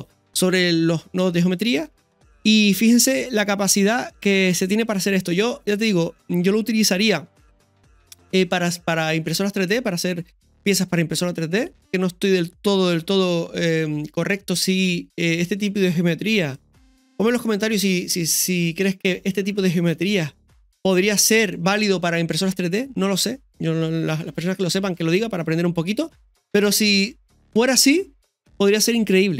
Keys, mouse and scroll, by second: 5.7 scroll down 1, 6.2-16.9 middle drag, 16.9 Tab, 17.3-17.7 scroll up 2, 18.0 middle click, 20.7 middle click, 23.8-24.5 scroll up 1, 24.5 scroll down 1, 25.1-26.3 middle drag.